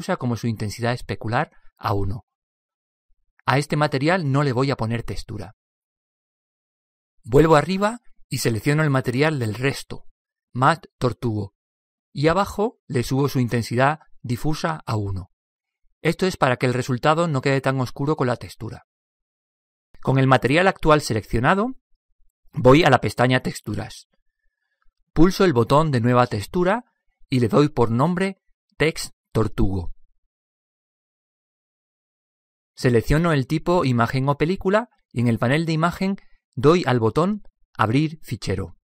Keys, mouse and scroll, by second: 0.1-2.9 drag, 5.0-6.8 drag, 9.8-11.4 drag, 12.6-14.2 drag, 14.3-16.1 drag, 17.9-19.7 drag, 23.6-25.5 drag, 26.7-27.0 drag, 29.1 click, 33.8-35.4 drag, 35.4 click, 36.6-38.2 drag.